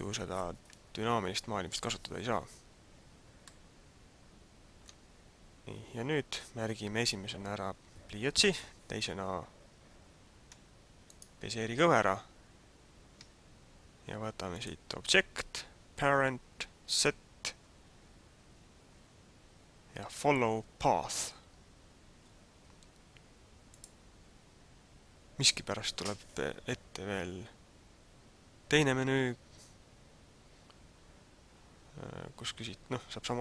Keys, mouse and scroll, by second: 3.7 middle click, 11.2 shift+right click, 14.5 click.